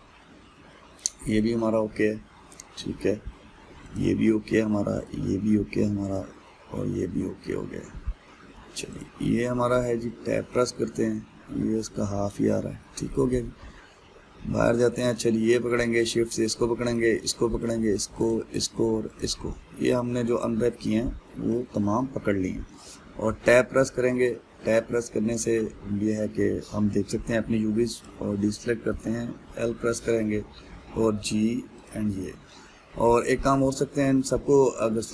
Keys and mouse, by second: 2.0 click, 2.5-4.5 middle drag, 4.5 click, 5.7 click, 6.0-6.7 middle drag, 6.7 click, 7.1-9.6 middle drag, 9.6 click, 10.6 Tab, 11.8-14.9 middle drag, 14.9 Tab, 15.2-16.7 middle drag, 16.7 shift+click, 17.5 shift+click, 18.9 shift+click, 19.8 shift+click, 20.1-23.9 middle drag, 23.9 Tab, 25.8-28.6 shift+middle drag, 28.6 click, 29.5 l, 31.4 g, 34.2 a.